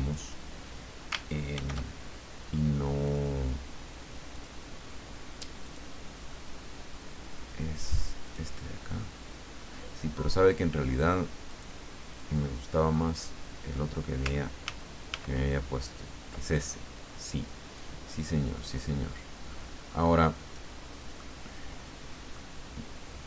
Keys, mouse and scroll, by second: 1.5 ctrl+shift+f, 3.0 click, 4.3 click, 5.6 click, 8.2 click, 11.5 click, 12.9 scroll up 2, 14.6 ctrl+z, 17.8-18.9 drag, 21.2-22.8 middle drag.